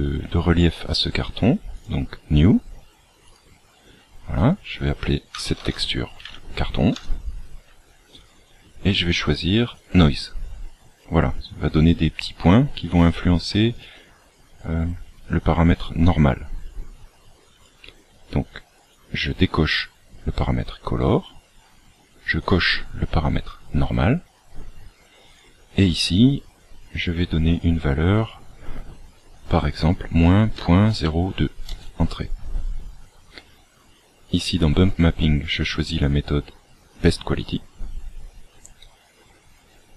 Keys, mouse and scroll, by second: 1.7 click, 3.3 click, 8.2 click, 15.4 click, 18.7 click, 22.5 click, 25.3 click, 32.7 scroll down 4, 35.9 click.